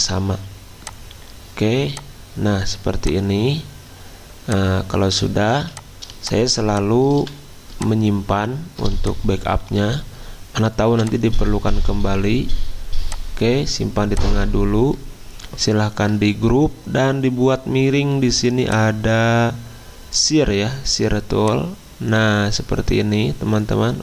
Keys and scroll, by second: 5.5 z, 7.1 v, 10.9 v, 14.0 v, 15.9 ctrl+g.